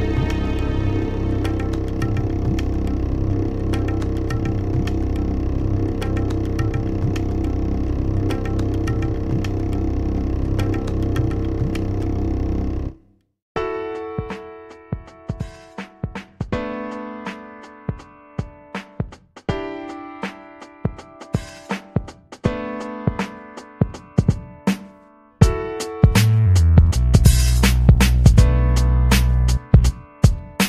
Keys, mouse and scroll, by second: 5.4 click, 9.1 click, 9.5-11.1 typing, 11.5 click, 12.0-15.1 ctrl+scroll down 14, 15.1-16.8 drag, 17.0-17.5 scroll down 4, 17.9 click, 18.7 scroll down 2, 19.2-19.7 scroll down 2, 19.7-20.7 drag, 21.6 click, 21.9 click, 22.2-23.3 typing, 23.4 click, 25.9 click.